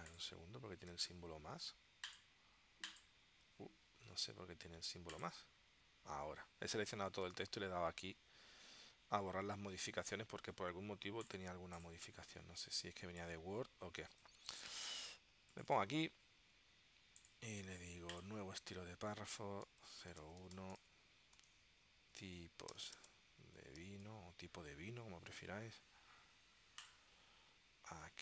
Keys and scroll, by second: 1.0 super+a, 12.5 space, 19.5-24.8 typing.